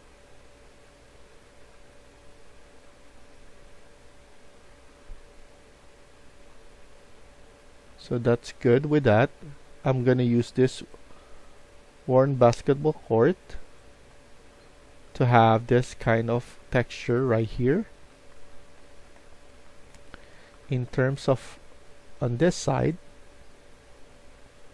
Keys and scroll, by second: 0.2-2.0 typing, 4.9 d, 9.1 a, 14.1-21.7 typing.